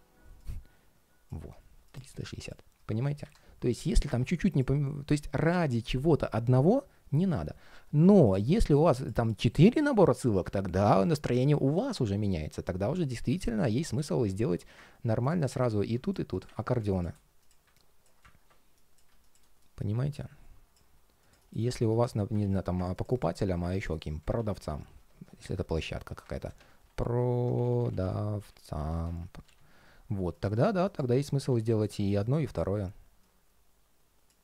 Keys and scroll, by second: 9.4 super+d, 13.0 super+z, 22.1 super+d.